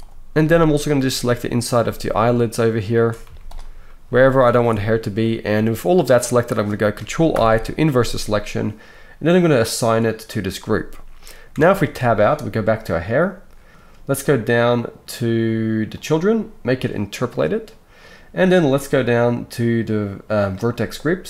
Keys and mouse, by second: 0.7-2.2 alt+shift+middle drag, 2.2 alt+shift+click, 2.2 alt+shift+middle click, 2.9 alt+shift+click, 3.0-9.7 alt+shift+middle drag, 3.2 z, 7.3 ctrl+i, 9.7-13.0 drag, 11.5 Tab, 13.0-13.7 middle drag, 13.7-17.3 drag, 17.3-20.5 middle drag, 20.5-21.2 drag.